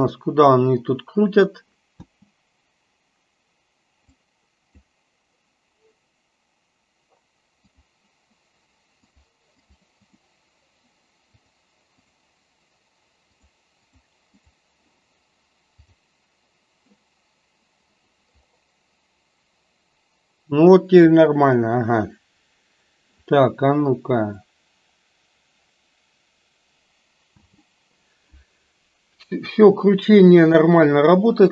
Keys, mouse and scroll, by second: 2.1 space, 4.2 click, 7.9 click, 9.2 click, 9.7 click, 10.2 click, 12.1 click, 13.3 click, 14.0 click, 16.0 click, 27.5 space.